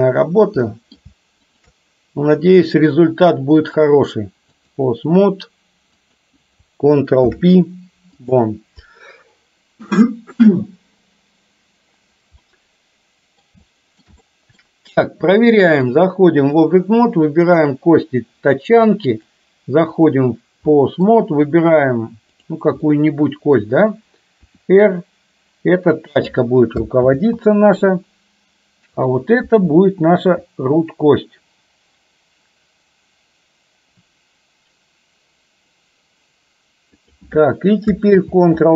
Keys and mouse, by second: 0.7-1.1 middle drag, 1.5 shift+click, 3.7-4.7 drag, 6.1 click, 7.2 ctrl+p, 12.5-13.5 middle drag, 13.7 shift+middle click, 14.2 middle click, 16.0 click, 17.6 click, 19.4 click, 20.9 middle drag, 22.5 click, 23.0-23.6 middle drag, 24.5 r, 27.1 ctrl+z, 29.1 click, 30.4 r, 38.2 ctrl+z.